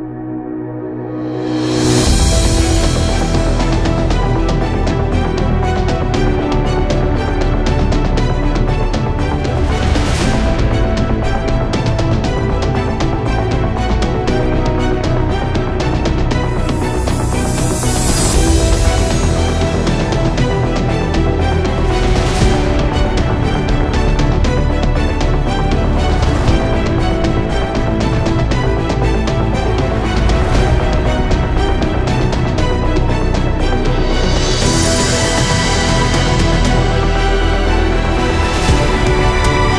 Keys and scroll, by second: 13.2 typing, 21.5-21.9 space, 37.8 space, 38.0 space.